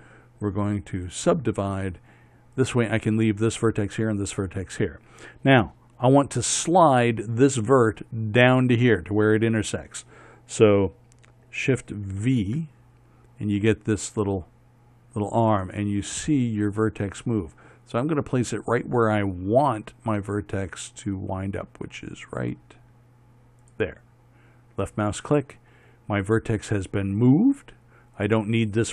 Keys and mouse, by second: 1.8-3.2 drag, 3.2-12.7 right drag, 12.7 shift+v, 26.3-28.8 middle drag, 28.8-28.9 drag.